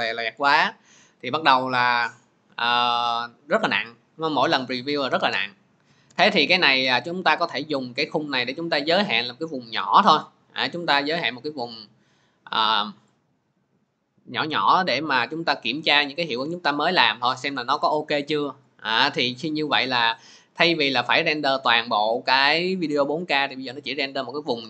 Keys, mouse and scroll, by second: 4.8 click, 5.9 click, 8.3 click, 10.0 click.